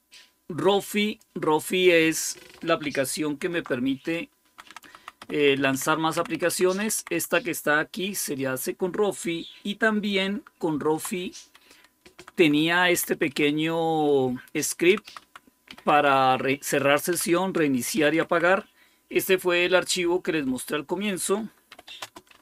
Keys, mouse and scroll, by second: 0.0-2.2 drag, 3.2 alt+super+d, 4.4 Down, 4.7 Down, 4.8 Down, 5.1 Up, 5.4 Up, 5.6 Up, 6.0 Down, 6.2 Down, 6.4 Down, 6.7 Up, 7.0 Up, 8.4 Escape, 10.6 super+x, 12.0 Down, 12.2 Down, 12.5 Down, 12.8 Up, 13.0 Up, 13.2 Up, 14.7 Down, 15.6 Up, 15.9 Up, 17.0 Down, 17.8 Up, 19.5 Escape, 21.4-22.4 typing.